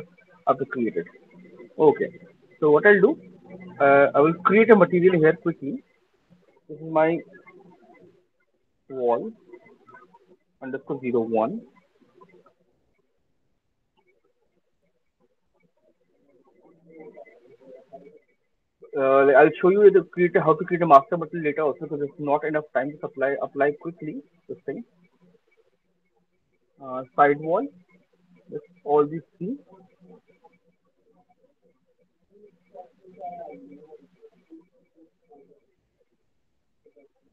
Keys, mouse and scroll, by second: 0.2 click, 1.4 click, 2.9 click, 4.5 click, 4.6 click, 5.5 click, 7.1-13.5 typing, 13.9 Return, 15.7 click, 16.0 click, 18.0 click, 21.6 click, 24.5 click, 26.4 click, 27.8 click, 28.7 ctrl+click, 29.3 ctrl+click, 31.3 click, 32.7 click, 34.5 click, 35.1 click, 35.6 right click, 36.0 click.